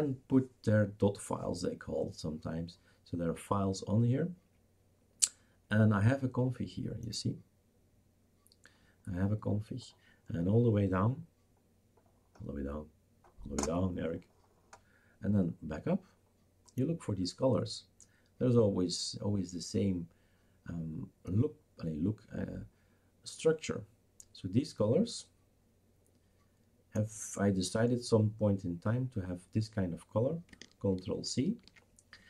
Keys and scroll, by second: 31.6 ctrl+c.